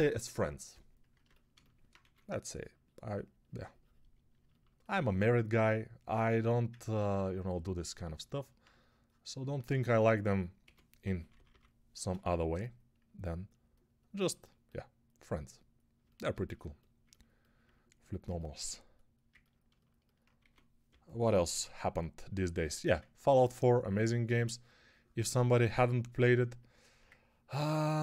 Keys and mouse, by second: 1.9 2, 6.2 1, 10.5-11.3 typing, 20.3-21.4 typing.